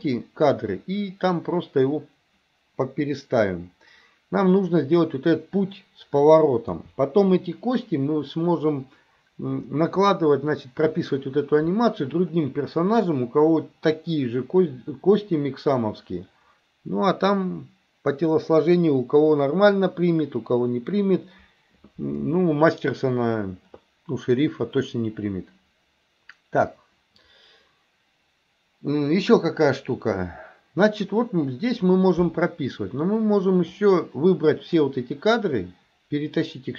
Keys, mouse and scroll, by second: 6.7 KP_3, 33.7-34.8 drag.